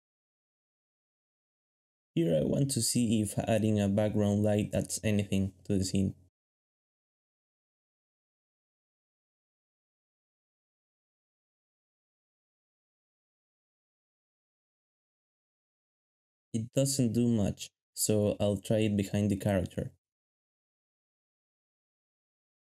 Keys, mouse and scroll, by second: 0.2 shift+middle click, 0.8 alt+a, 2.9 shift+middle click, 4.4-6.0 typing, 6.7 alt+middle click, 7.2 g, 9.6 ctrl+b, 12.4 alt+shift+z, 12.9 alt+shift+z, 17.0-18.5 typing, 19.6-21.3 typing, 20.9 shift+middle click, 21.2 shift+middle click, 22.4 shift+middle click.